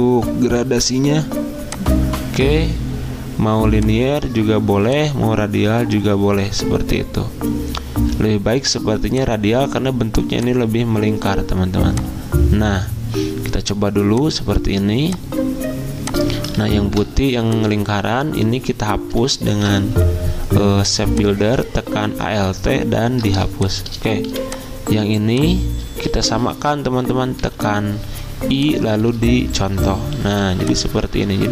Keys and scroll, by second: 16.6 ctrl+z, 19.6 m, 23.4 v, 25.9 ctrl+z, 27.4 i, 30.3 v.